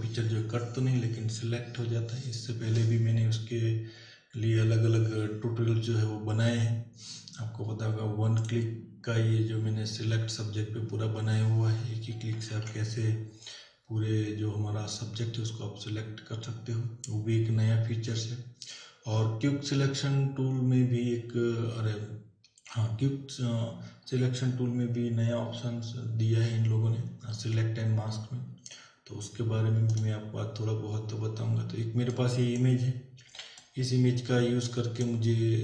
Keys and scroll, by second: 12.6 ctrl+w, 33.2 z.